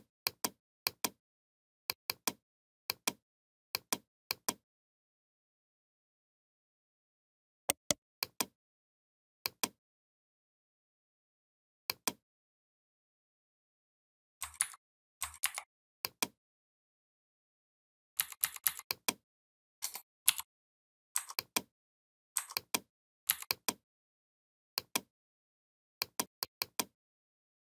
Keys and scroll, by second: 14.4 ctrl+c, 15.2 ctrl+f, 18.0 v, 20.1 shift+m, 23.1 v.